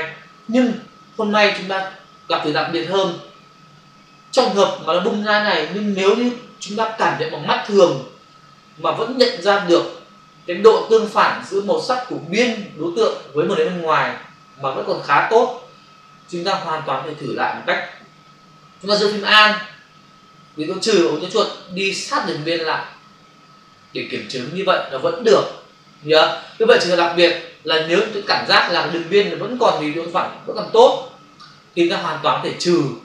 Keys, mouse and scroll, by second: 21.2 alt+click.